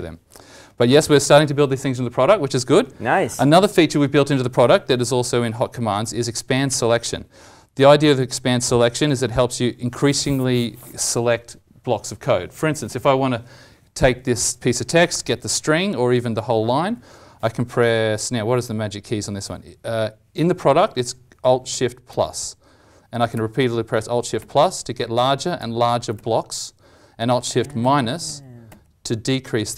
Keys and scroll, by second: 22.0 alt+shift+=, 23.3 alt+shift+=, 24.3 alt+shift+=, 25.5 alt+shift+=, 26.1 alt+shift+=, 27.8 alt+shift+-, 28.2 alt+shift+-, 28.6 alt+shift+-.